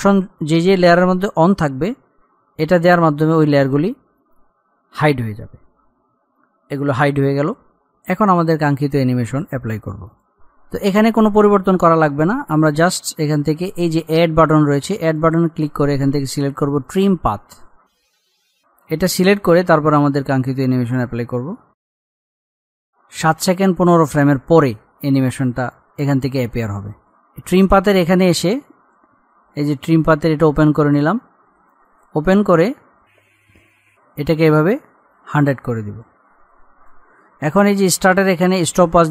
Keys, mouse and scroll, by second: 3.4 click, 4.8 scroll up 1, 7.8 scroll up 1, 10.4 click, 10.6 ctrl+z, 11.3-12.1 scroll up 1, 15.1 click, 17.5-18.1 scroll down 1, 18.1-18.7 scroll up 1, 20.0-25.2 drag, 26.0 scroll up 1, 26.2 click, 27.4-28.2 scroll down 1, 30.0 click, 33.8 click.